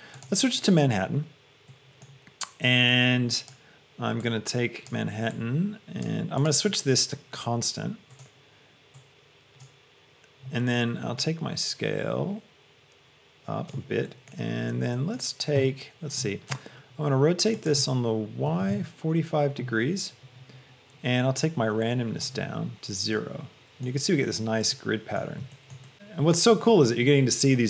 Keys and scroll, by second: 18.8 Return.